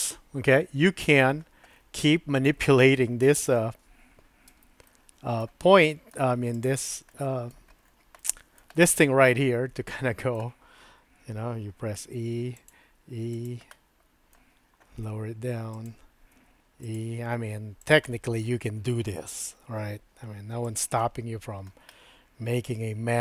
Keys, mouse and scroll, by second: 3.4 click, 4.5 Tab, 4.9 middle click, 6.0 middle click, 6.6 click, 7.1 middle click, 8.2 shift+middle click, 8.7 middle click, 9.3-10.4 middle drag, 12.0 e, 12.9 e, 13.8 middle click, 15.0 g, 16.3 e, 17.0 e, 18.0 click, 19.5 g, 21.1 click, 22.0 click.